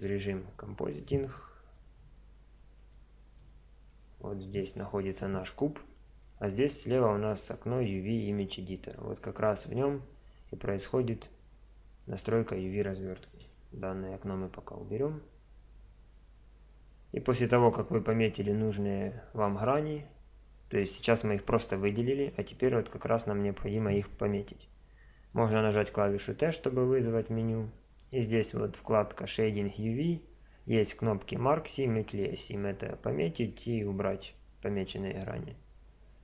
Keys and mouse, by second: 0.0-0.8 drag, 0.8 middle click, 1.0 click, 1.4 middle click, 1.9 click, 2.0 middle click, 2.2 click, 2.2-3.9 middle drag, 3.9 z, 11.3-13.8 drag, 13.8 n, 14.8-16.6 middle drag, 17.0-19.7 middle drag, 25.6 t, 28.0-28.8 drag.